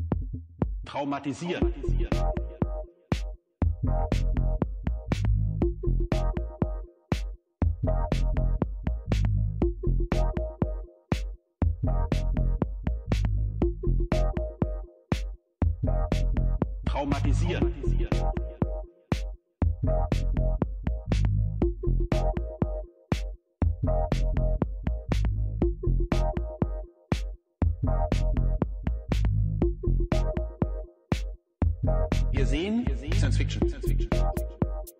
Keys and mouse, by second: 1.4-2.3 drag, 3.4 click, 26.1 click, 30.7-31.1 middle drag, 31.5 drag, 31.6 middle click, 31.7-32.1 drag, 32.1-32.9 middle drag, 33.2 middle click, 33.7 middle click.